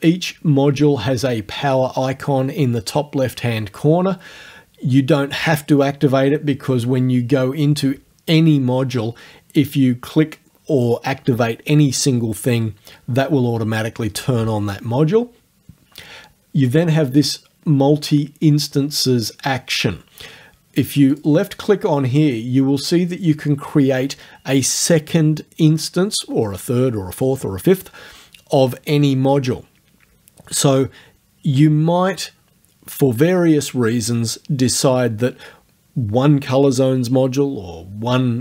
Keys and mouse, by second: 21.2 click.